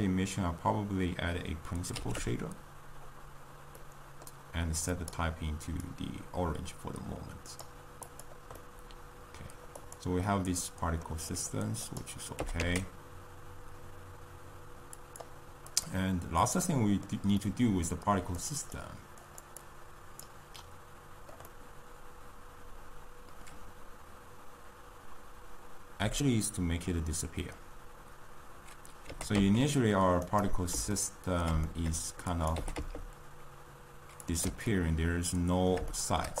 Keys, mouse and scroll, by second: 2.2 r, 4.3-5.9 middle drag, 5.9 click, 8.4 click, 8.7-9.8 middle drag, 9.8 drag, 10.3-12.0 middle drag, 12.0 click, 12.7 g, 15.7 click, 29.4 g, 30.9-32.4 ctrl+middle drag, 32.4 click, 32.8 g, 34.9-36.4 ctrl+middle drag.